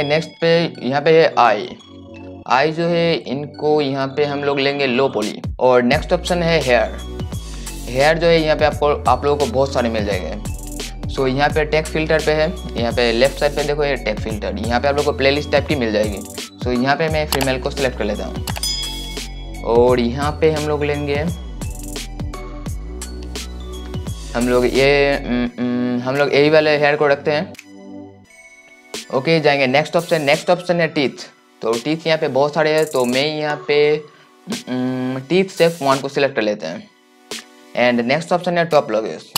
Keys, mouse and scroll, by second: 3.3 right click, 12.6-28.6 drag.